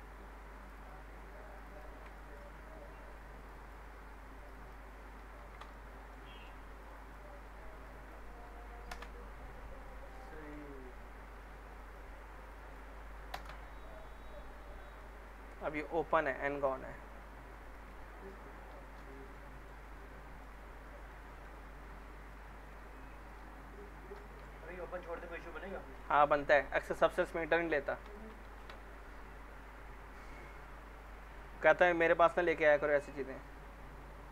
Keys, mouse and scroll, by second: 0.6 ctrl+click, 3.4 ctrl+click, 5.2 ctrl+z, 5.7-6.3 alt+middle click, 6.8 ctrl+click, 8.9 ctrl+BackSpace, 9.6 scroll down 1, 9.9-10.5 alt+middle click, 10.8-11.3 alt+scroll up 1, 11.7 click, 13.3 ctrl+BackSpace, 14.0 scroll down 1, 14.3-15.2 alt+middle click, 15.3 scroll up 1, 15.5 middle click, 16.6 click, 18.1 ctrl+click, 18.7 ctrl+shift+e, 19.1 middle click, 20.6 scroll down 1, 20.9 alt+middle click, 22.3-22.9 alt+middle click, 22.9-23.6 click, 24.0 ctrl+shift+e, 24.2 scroll down 2, 24.4-26.9 alt+middle drag, 28.0 click, 28.5 ctrl+a, 30.6-31.2 drag.